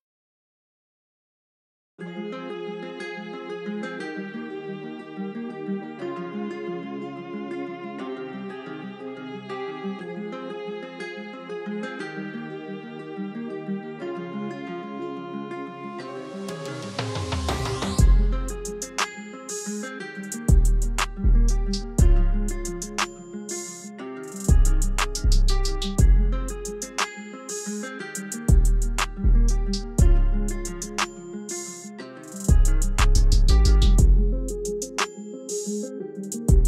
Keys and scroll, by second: 14.3 shift+t, 35.2 c.